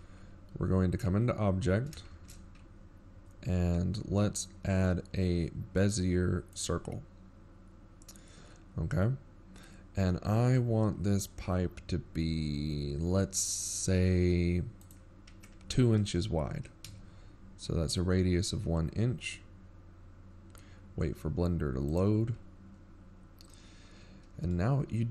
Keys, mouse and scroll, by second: 8.6 shift+a, 16.8-17.3 scroll up 3, 17.6-19.3 scroll up 3, 21.5 click.